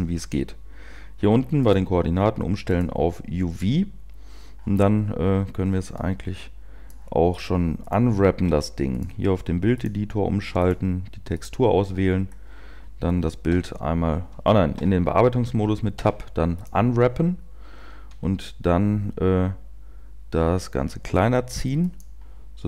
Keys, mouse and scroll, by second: 1.9 scroll down 7, 2.0 click, 6.0 click, 15.8 Tab, 15.8 u, 16.9 u, 18.0 s.